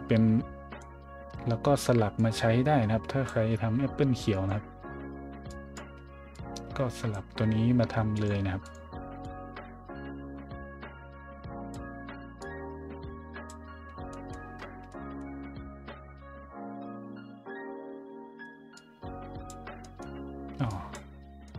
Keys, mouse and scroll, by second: 2.1-3.2 drag, 4.3 click, 5.5 drag, 6.3-7.1 drag, 8.1 click, 8.6 click, 9.2-11.7 drag, 12.4-13.4 drag, 14.1-14.5 scroll up 2, 14.8-15.2 middle drag, 18.7 click, 19.8 middle click, 20.7 drag, 21.4 middle click.